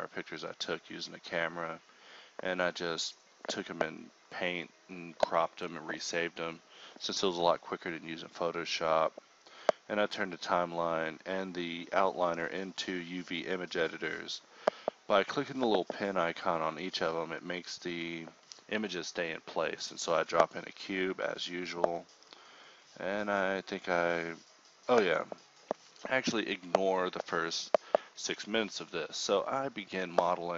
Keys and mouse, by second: 0.0-1.1 drag, 1.3 click, 2.5-4.3 typing, 3.8 click, 7.9 alt+g, 8.4 shift+c, 8.8 Tab, 9.0 ctrl+r, 9.6 z, 9.8 a, 10.2 ctrl+z, 10.6 ctrl+click, 10.9 space, 11.0 x, 11.5 x, 15.0 z, 15.8 ctrl+e, 16.0 ctrl+r, 16.7 alt+s, 17.3 KP_7, 17.6 ctrl+r, 17.9 click, 18.7 ctrl+z, 19.1 click, 20.0 g, 20.5 g, 21.3 ctrl+r, 21.6-23.8 typing, 22.4 ctrl+Tab, 25.6 z, 25.6 a, 25.6 k, 26.7 ctrl+z, 26.8 a, 27.0 a, 27.2 k, 28.3 ctrl+Tab, 28.8-30.5 typing.